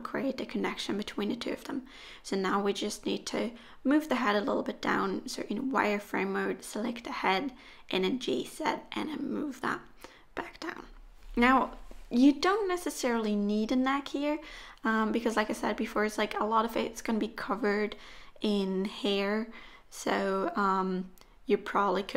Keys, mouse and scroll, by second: 1.7 z, 3.6 click, 6.2 g, 10.5 Tab, 11.0-11.6 scroll down 2, 11.6 click, 12.9 click, 13.3 middle click, 14.4-14.8 scroll down 3, 14.6 middle click, 19.0 middle click, 19.6 click, 20.0 Tab, 20.3-21.0 scroll up 6, 21.0 shift+middle click, 21.7 scroll up 2.